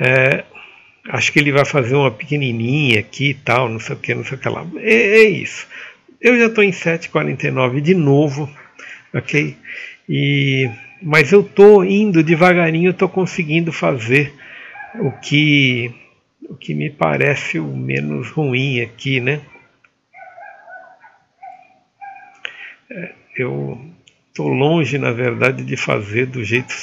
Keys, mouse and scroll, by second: 21.5-24.9 scroll up 1.